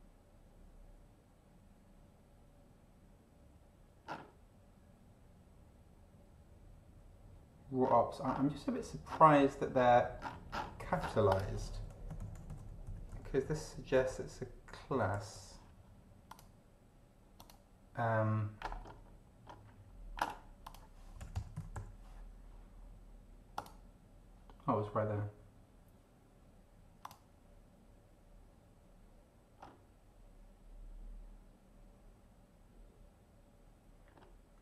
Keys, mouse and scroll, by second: 4.1 scroll down 2, 7.8-8.5 scroll down 4, 9.1-11.3 scroll down 8, 11.3 click, 11.7 ctrl+f, 12.2 ctrl+shift+c, 12.3 ctrl+shift+o, 12.5 ctrl+shift+n, 12.6 ctrl+shift+c, 12.9 ctrl+shift+a, 13.1 ctrl+shift+t, 13.5 ctrl+shift+e, 13.9 ctrl+shift+n, 14.6-15.8 typing, 16.3 click, 17.3 click, 18.8-19.9 scroll up 4, 20.6 click, 20.9-22.2 typing, 23.5 click, 27.0 click, 29.6 scroll down 2.